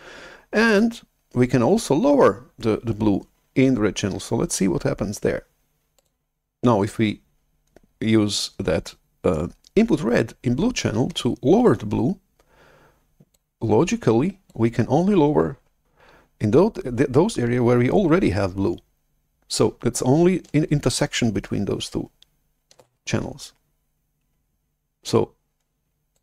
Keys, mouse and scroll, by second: 5.9-8.5 drag, 13.3-16.9 drag, 22.9 shift+super+F11.